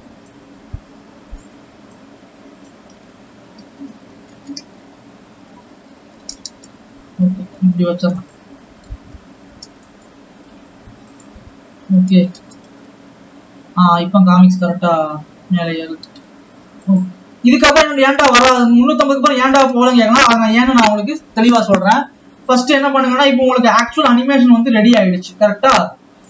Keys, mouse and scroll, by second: 0.0 click, 11.6 click, 11.9 scroll up 2, 12.2 alt+a, 12.4 space, 16.4 space, 16.9-18.1 drag, 18.2 space, 19.8 space, 20.1 ctrl+s, 24.7 click.